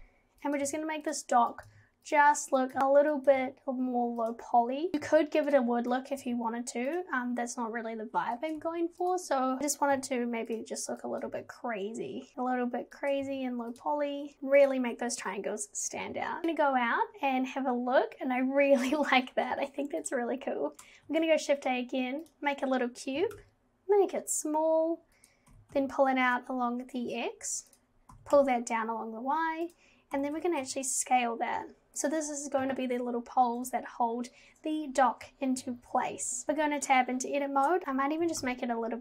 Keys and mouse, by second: 0.7 g, 2.7 click, 2.8 g, 3.2 click, 3.4 g, 4.9 click, 5.1 g, 6.1 click, 6.2 g, 8.5 click, 8.6 g, 9.6 ctrl+z, 10.0 g, 11.1 click, 11.3 g, 13.2 g, 14.3 g, 16.4 Tab, 21.1 shift+a, 23.2 g, 25.5 g, 28.1 g, 30.1 g, 36.4 Tab, 37.8 ctrl+z, 37.8 g, 38.2 g.